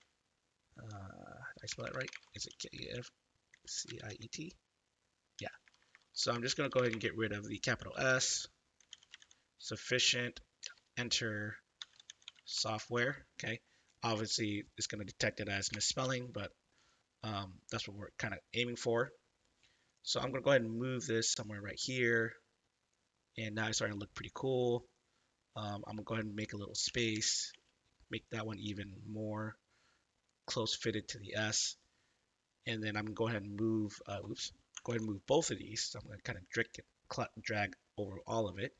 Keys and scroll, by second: 0.0-9.7 typing, 10.6 Return, 11.5-13.0 typing, 15.7 BackSpace, 16.0 u, 26.8 Right, 27.1 Left, 27.5 space, 34.8 ctrl+z.